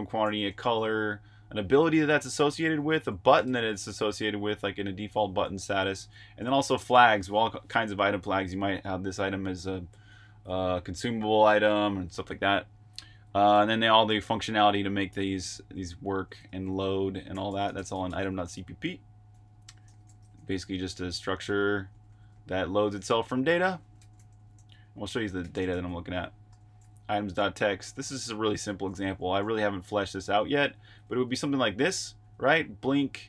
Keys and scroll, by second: 1.0 typing, 14.6-27.1 typing, 28.9-31.4 typing.